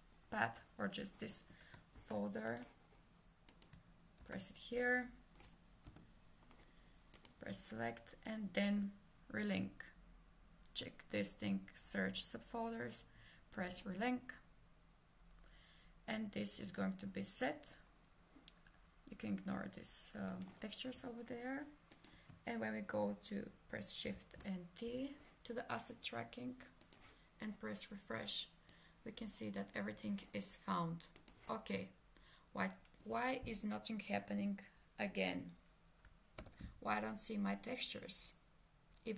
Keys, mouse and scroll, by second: 2.0 ctrl+c, 2.5 click, 4.2 ctrl+v, 5.9 Return, 7.2 click, 13.6 click, 20.3 click, 24.1 shift+t, 30.0 click, 36.4 ctrl+space.